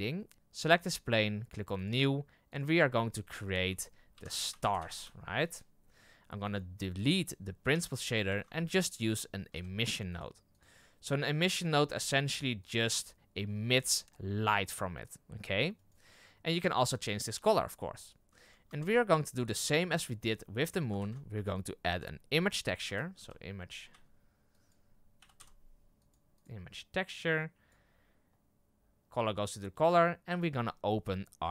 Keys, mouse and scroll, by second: 0.3-0.7 scroll down 3, 0.7 right click, 1.8-6.5 drag, 7.6 Delete, 11.7-12.7 drag, 14.2-15.7 drag, 17.4 click, 27.7 click, 30.5-31.5 drag.